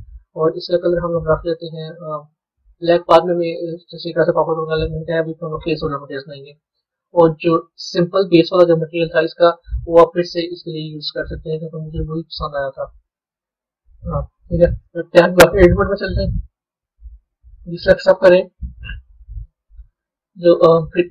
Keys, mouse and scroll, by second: 0.3 click, 7.7-13.4 drag, 13.5-16.4 middle drag, 16.4 b, 18.1-19.9 middle drag, 19.9-20.4 scroll down 2.